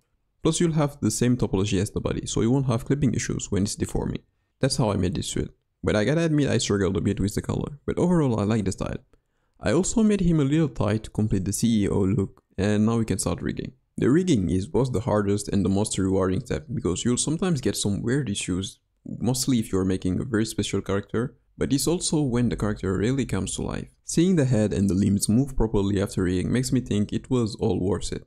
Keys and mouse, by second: 1.9 click, 3.0 g, 5.0 KP_1, 6.0-6.4 shift+middle drag, 7.4 middle click, 8.2 shift+middle click, 8.7-9.8 middle drag, 10.6-11.1 drag, 12.1 drag, 12.8 KP_3, 13.3 KP_1, 13.9 g, 15.8 click, 16.3 g, 18.4 middle click, 18.6 g, 22.2 r, 24.0 ctrl+Tab, 24.0 g, 26.9 g.